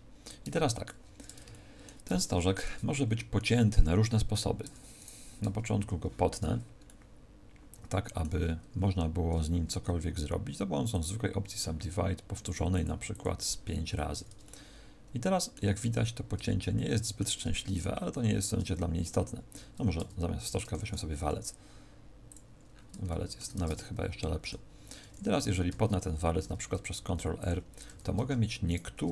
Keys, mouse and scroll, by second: 0.2 click, 1.4 shift+middle click, 2.2 middle click, 4.9 right click, 5.7 ctrl+KP_Add, 6.8 middle click, 9.2 w, 12.4 click, 12.7 click, 14.0 a, 14.4 middle click, 15.8-16.3 scroll up 5, 16.5 shift+middle click, 19.9 Tab, 20.4 x, 20.7 shift+a, 22.6-23.0 scroll down 5, 23.0 shift+middle click, 23.5 Tab, 23.7 middle click, 25.4 scroll up 1, 25.6 ctrl+r, 27.4 click, 27.8 a, 28.6 alt+shift+right click.